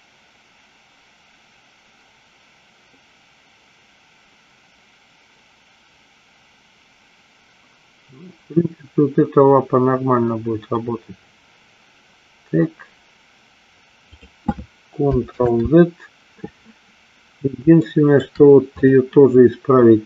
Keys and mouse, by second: 15.6 ctrl+z, 18.0 shift+middle click.